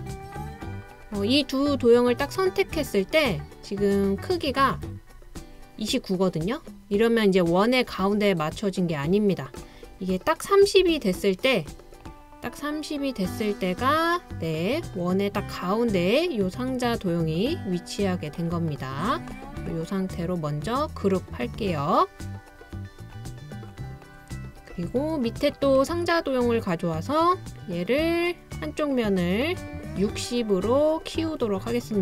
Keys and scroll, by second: 10.8 Page_Down, 10.9 ⌧, 11.0 Down.